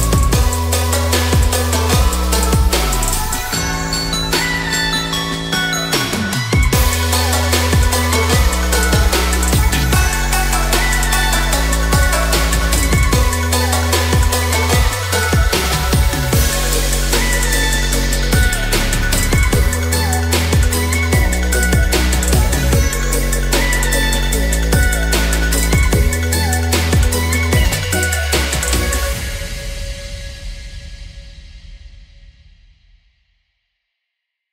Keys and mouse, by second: 0.2 click, 1.7-2.1 middle drag, 2.6-3.1 ctrl+drag, 3.5 ctrl+z, 4.1 shift+drag, 4.7 ctrl+b, 6.8 click, 7.3 middle click, 8.0 Tab, 8.0 middle click, 8.2 ctrl+s, 8.9-9.3 middle drag, 9.9 middle click, 11.0-14.0 drag, 14.3-15.1 middle drag, 15.8-18.9 drag, 20.7 click, 22.8 click, 25.1 click, 27.9-29.0 middle drag, 30.2 ctrl+a, 31.2-31.7 middle drag, 32.1-32.8 middle drag, 33.4 click.